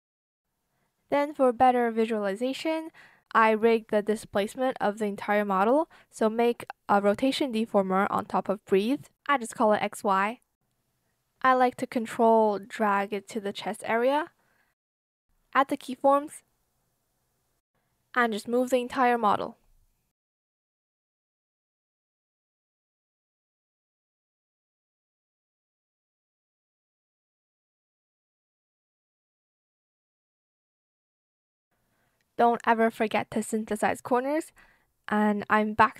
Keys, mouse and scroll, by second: 1.4 shift+click, 1.6 shift+click, 2.4 Return, 8.2-9.2 typing, 10.9 ctrl+shift+click, 12.8 space, 12.9 click, 14.1 click, 16.5 shift+click, 18.8 shift+click, 25.8 shift+click, 26.2 shift+click, 28.8 shift+click, 29.3 shift+click, 31.1 shift+click, 31.5 shift+click, 33.4 shift+Return, 35.8 shift+click.